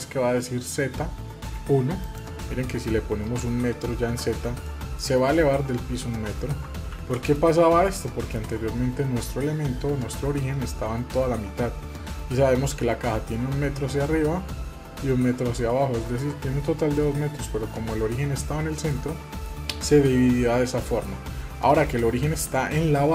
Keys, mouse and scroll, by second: 2.0-4.6 drag, 4.6-6.9 middle drag, 6.9 ctrl+z, 7.4-8.3 middle drag, 18.9 middle click, 19.7-21.5 middle drag, 21.5 scroll up 1, 22.5-23.1 middle drag.